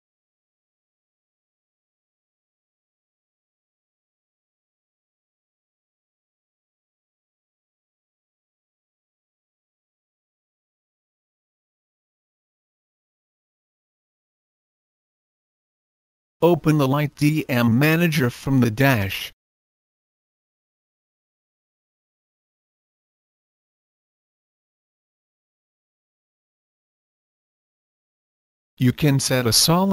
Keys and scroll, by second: 0.5 typing, 2.1 typing, 3.0 Return, 18.0-19.2 typing.